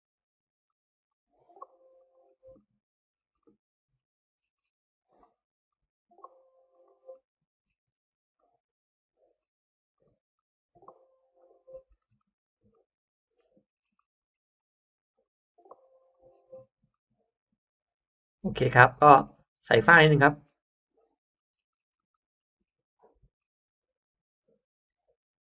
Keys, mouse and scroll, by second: 0.5 click, 1.0 click, 1.9 click, 2.2 scroll down 1, 2.5 middle click, 2.8 scroll down 1, 3.3 scroll up 1, 3.3 middle click, 3.5 scroll down 1, 3.9-4.5 scroll, 4.7-5.0 scroll up 1, 5.0 click, 5.6 click, 6.6 click, 7.0 middle click, 7.2-9.1 scroll down 3, 8.3 middle click, 9.1-9.7 scroll up 1, 10.3 click, 11.6-11.9 scroll down 1, 12.0 scroll up 1, 12.1 middle click, 12.3 scroll down 1, 12.6-12.9 scroll up 1, 12.7 middle click, 13.3-13.6 scroll down 1, 13.8-14.4 scroll up 2, 14.5 click, 15.1 click, 15.9 click, 16.2-16.5 scroll down 1, 16.8-17.2 scroll up 1, 16.9-18.6 middle drag, 18.7 scroll down 1, 18.9 space, 19.2-19.5 scroll up 1, 19.9 middle click, 20.1-21.2 scroll up 3, 20.9 middle click, 21.2-21.5 scroll down 1, 21.6 scroll up 1, 21.9 middle click, 22.3 scroll down 1, 22.3 middle click, 22.7-23.5 scroll up 2, 23.7 e, 24.9 r.